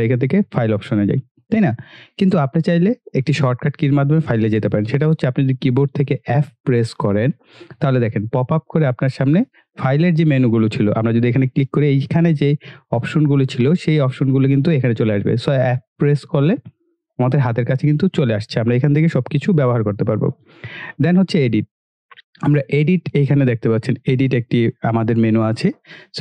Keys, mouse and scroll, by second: 0.6 click, 0.6 typing, 5.2 click, 6.8 f, 10.9 click, 14.3 click, 15.6 f, 21.1 click, 24.9 click.